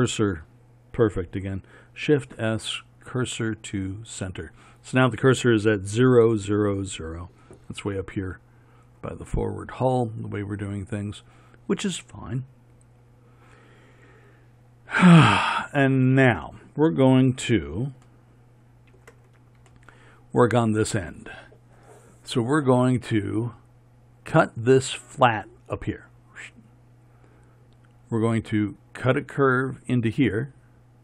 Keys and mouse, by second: 2.2 shift+s, 7.8-18.7 middle drag.